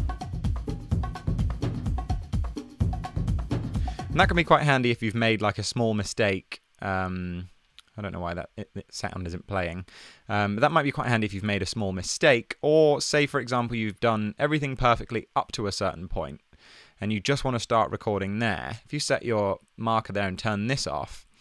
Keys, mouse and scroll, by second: 4.6 click, 4.7 super+z.